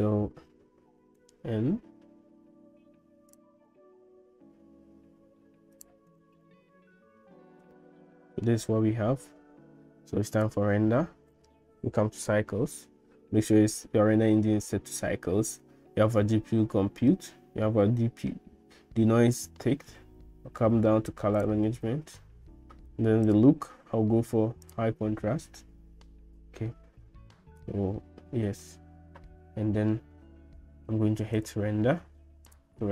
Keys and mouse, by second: 1.4 n, 3.3 click, 5.8 click, 6.1 n, 7.7 shift+middle click, 21.4 click, 23.3-24.9 drag, 31.4-32.9 drag.